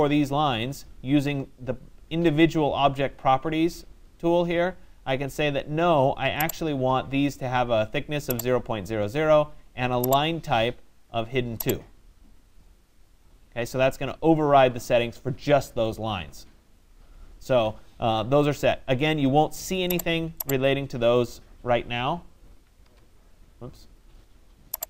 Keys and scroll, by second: 22.4 Return.